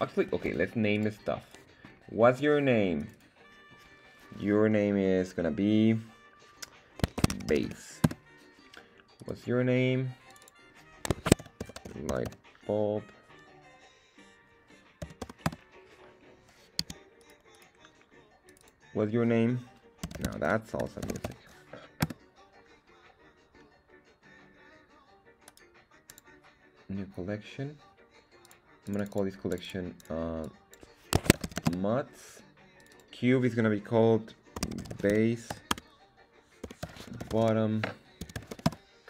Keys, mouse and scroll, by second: 0.2 Escape, 0.9 click, 1.4 right click, 1.8-2.2 scroll down 2, 2.9 click, 3.1-8.6 drag, 9.2 right click, 10.2 click, 10.4-16.0 drag, 16.8 z, 17.1 right click, 17.5 right click, 18.4 click, 18.6-22.6 drag, 25.4-26.1 right drag, 28.4 click, 28.8 click, 28.9-32.3 drag, 32.7 click, 32.9-39.0 drag.